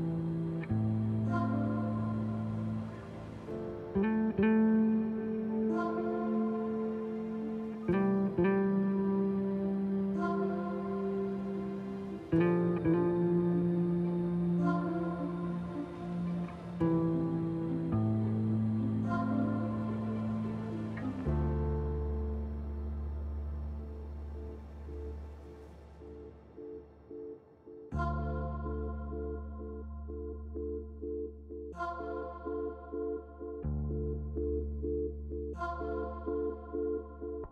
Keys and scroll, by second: 0.1 shift+s, 1.3 s, 2.5 s, 3.1 shift+s, 3.2 shift+s, 13.1 s, 13.5 s, 15.3 shift+s, 15.9 s, 17.7 shift+s, 22.0 shift+s, 22.5 s, 24.7 shift+s, 25.5 s, 27.3 s, 34.6 s.